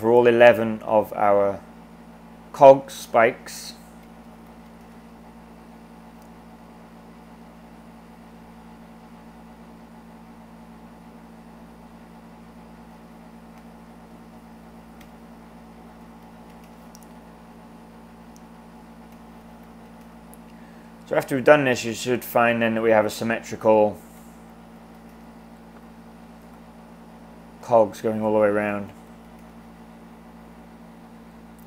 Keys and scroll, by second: 3.8-5.1 typing, 13.6 typing, 15.0-16.9 typing, 18.9-20.3 typing, 23.9-25.4 typing, 28.4-29.7 typing.